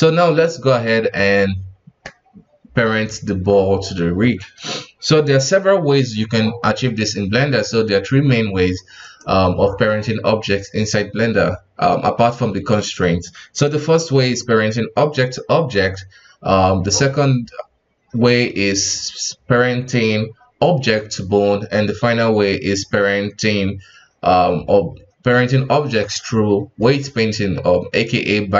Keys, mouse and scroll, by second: 9.0 right click.